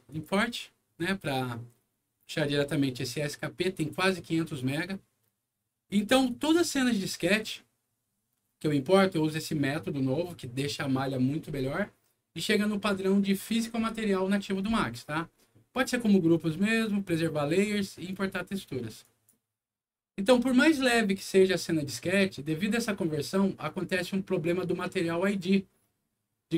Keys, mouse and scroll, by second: 0.0 click, 2.1 click, 5.8 click, 6.2 click, 19.0 click.